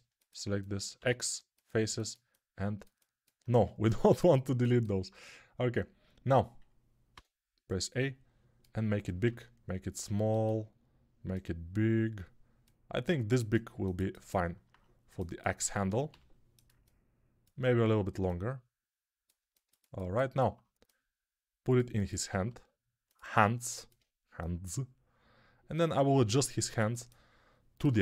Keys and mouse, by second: 0.8 x, 3.4 ctrl+z, 7.0 a, 8.9-10.5 drag, 8.9 s, 10.5-11.9 middle drag, 11.9-13.6 drag, 12.8 s, 13.6-19.0 alt+shift+middle drag, 16.0 g, 19.0 click, 19.2-23.1 alt+right drag, 22.3 g, 23.1-25.3 alt+middle drag, 25.3-26.8 drag, 26.0 g, 26.8-28.0 alt+middle drag.